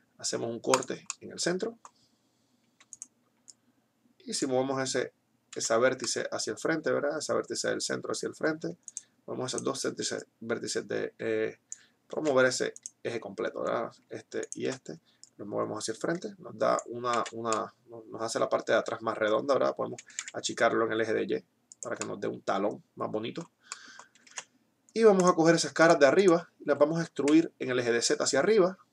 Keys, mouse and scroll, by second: 2.1 middle click, 2.8-5.3 right drag, 3.5-4.8 drag, 5.1 z, 9.0-11.5 right drag, 12.5 ctrl+z, 15.6 middle click, 16.0 click, 16.0 right click, 16.8 z, 20.1 s, 24.6 ctrl+Tab, 27.6 e.